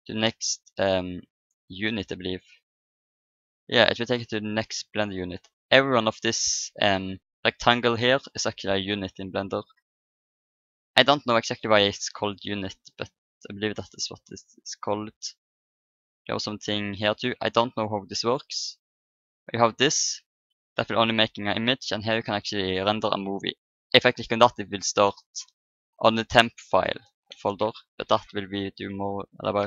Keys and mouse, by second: 1.9 KP_7, 3.7-5.4 middle drag, 5.5 middle click, 11.2-18.0 middle drag, 18.0-19.1 drag, 20.0 click, 21.3 Escape, 21.8 click, 29.3 ctrl+n.